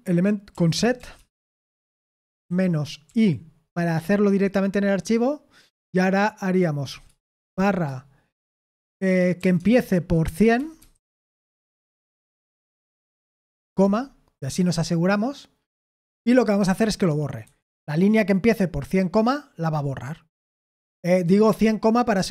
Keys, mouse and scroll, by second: 0.2-1.4 typing, 2.8-3.6 typing, 6.8-7.3 typing, 10.0-11.2 typing, 16.2-16.6 typing, 17.4 Escape.